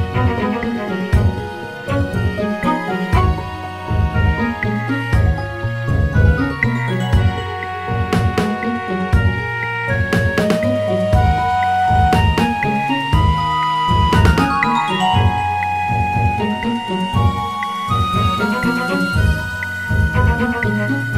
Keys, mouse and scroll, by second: 0.7-1.5 scroll up 3, 1.5 click, 2.3 Tab, 2.7-3.4 scroll up 4, 3.4 click, 6.3 g, 13.1 Tab, 13.7-14.6 scroll down 4, 15.1-15.8 scroll up 2, 15.8 scroll up 1, 16.3 Tab, 16.7-17.3 scroll up 1, 17.3 click, 18.5 g, 20.9-21.1 scroll down 2.